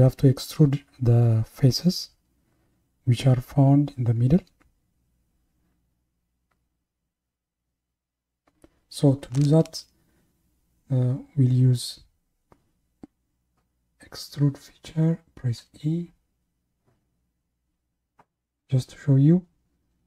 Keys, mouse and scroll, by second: 15.6 e.